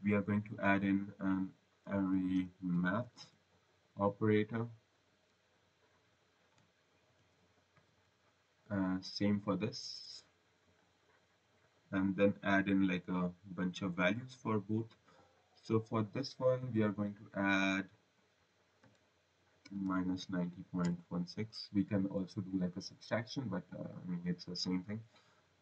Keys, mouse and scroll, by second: 3.3 typing, 4.8 click, 7.1 ctrl+c, 7.7 v, 8.3 click, 10.3 click, 10.7 click, 16.8 click, 18.7 -, 19.8-20.9 typing, 23.6 click, 24.7 click.